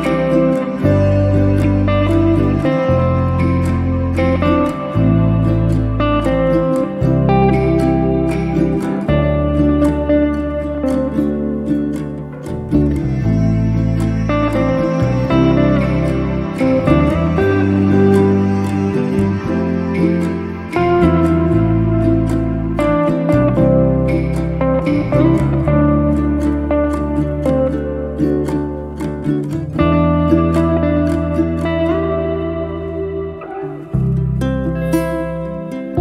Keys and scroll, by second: 17.2 b.